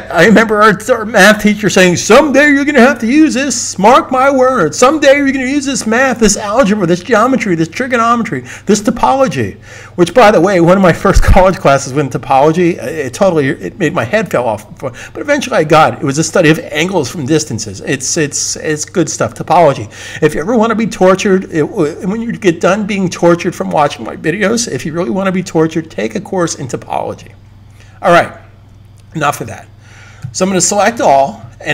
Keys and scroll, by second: 30.1 super+a.